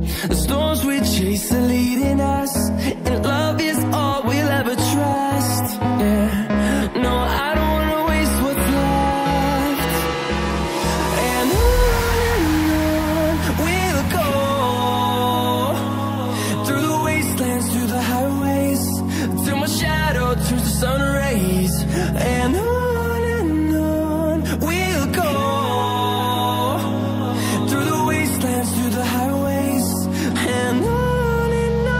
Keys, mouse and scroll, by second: 3.2-3.8 scroll up 1, 4.1 click, 6.3-6.7 scroll down 1, 7.4 click, 7.8-8.5 scroll down 1, 8.5 scroll up 1, 9.5 click, 10.1 ctrl+c, 10.3 typing, 11.6 typing, 14.5 double click, 15.3 ctrl+a, 15.9-17.9 typing, 19.0 click, 20.1-21.4 scroll up 1, 21.4 click, 23.0 double click, 24.1 click, 25.0-25.4 scroll down 1, 25.6 click, 26.2 ctrl+c, 30.0-31.4 scroll up 1.